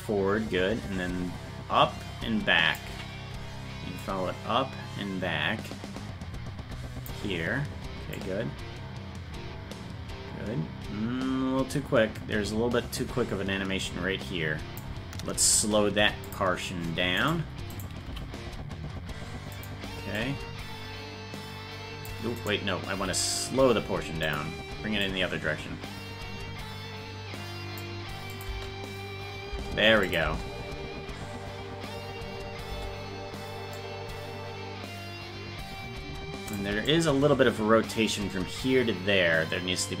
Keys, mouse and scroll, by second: 4.0-7.1 drag, 8.2-14.8 drag, 17.2 right click, 17.7 right click, 18.1 g, 20.2-22.1 drag, 22.4 right click, 23.0 g, 25.1-27.8 drag, 28.3 click, 28.5 space, 30.1 click, 30.1 space, 30.3 space, 33.8-36.6 drag, 33.8 space, 36.9-40.0 drag.